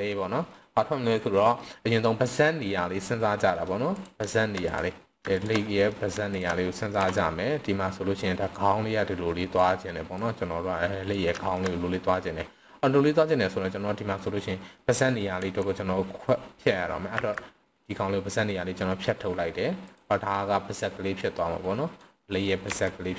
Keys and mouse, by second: 0.3 middle click, 1.6 middle click, 3.2-3.5 middle drag, 3.9 click, 5.3 shift+drag, 5.6 middle drag, 7.0 KP_3, 8.6-9.6 drag, 10.1-11.1 drag, 11.4 shift+middle click, 11.9 middle click, 15.4 KP_3, 17.2 v, 19.8 click, 21.2-22.0 drag, 22.7 r.